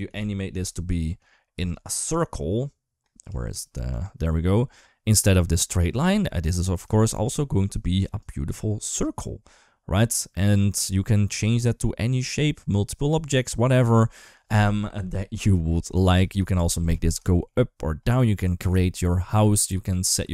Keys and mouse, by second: 1.3 d, 1.4-3.0 drag, 3.0 d, 3.7 click, 3.7 d, 6.7 shift+middle click, 7.9 d, 8.7-13.7 right drag, 13.7 d, 15.5 KP_1, 15.9 KP_3, 17.0 shift+middle click, 17.3 middle click.